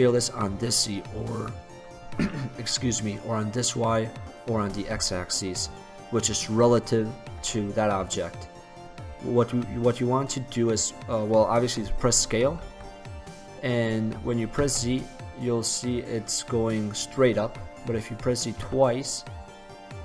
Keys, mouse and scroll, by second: 7.7 middle click, 8.6-9.2 scroll up 1, 9.2-9.5 scroll up 1, 12.7 s.